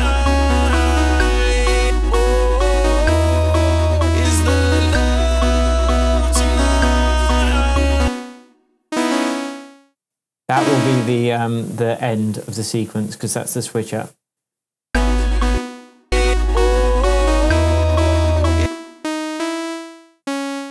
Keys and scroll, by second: 8.0 space, 10.0 BackSpace, 11.3 super+c, 12.5 super+v, 14.8 space, 18.5 space, 20.5 BackSpace.